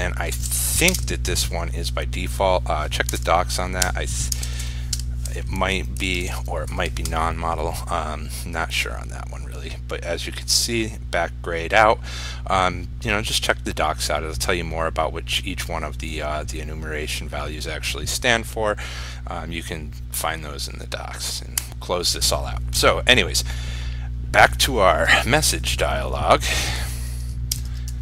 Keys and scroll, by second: 1.1 ctrl+space, 6.2 ctrl+s, 7.0 ctrl+r.